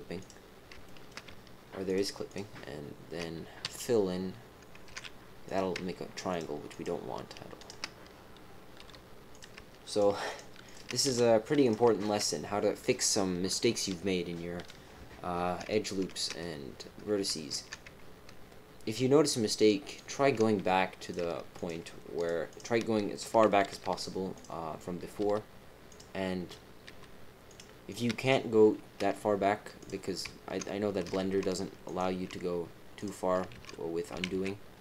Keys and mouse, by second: 0.8 shift+click, 1.8 shift+click, 2.2 shift+click, 3.6 f, 4.8 ctrl+z, 5.4 click, 6.3 shift+click, 6.7 shift+click, 7.5 shift+click, 8.7 f, 9.3 click, 9.8 shift+click, 10.6 shift+click, 11.0 f, 11.6 click, 13.0 click, 13.6 click, 19.9 ctrl+click, 21.0 click, 21.5 shift+click, 22.1 shift+click, 22.4 shift+click, 23.8 f, 24.3 click, 25.2 f, 25.8 click, 26.8 g, 27.9 click, 28.2 shift+click, 29.8 click, 31.8 ctrl+click, 32.9 click, 33.5 ctrl+z, 34.2 ctrl+z.